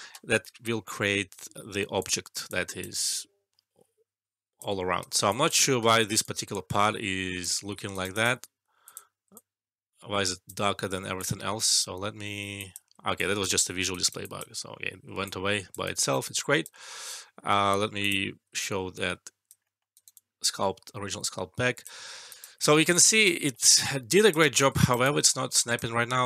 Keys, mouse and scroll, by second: 1.2 shift+s, 1.9 click, 2.4-3.9 alt+click, 4.8 alt+middle click, 5.0 alt+right click, 5.3 alt+click, 6.2-7.4 alt+click, 7.6 alt+middle click, 7.9 alt+right click, 8.1 alt+click, 9.3-10.5 alt+drag, 11.1 click, 11.7 alt+click, 13.1 alt+click, 13.9 alt+right click, 14.2 alt+click, 14.5 alt+middle click, 15.2-16.1 alt+click, 15.8 alt+right click, 16.2 alt+click, 16.5-17.0 alt+click, 16.7 alt+middle click, 17.8 click, 18.0 click, 18.5-19.5 alt+click, 19.6 alt+middle click, 19.9 alt+right click, 20.1-22.5 alt+click, 22.0 alt+middle click, 22.2 alt+right click, 22.9 alt+click, 23.3 alt+middle click, 23.6 alt+right click, 23.8-24.4 alt+click, 24.7 alt+right click, 25.0-26.1 alt+click, 25.9 alt+middle click.